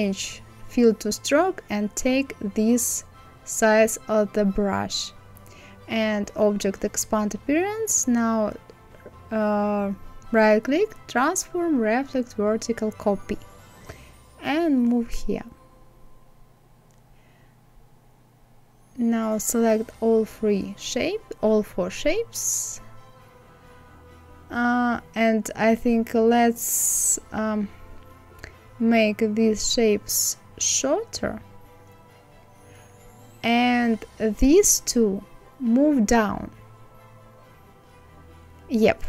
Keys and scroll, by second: 36.3 Down.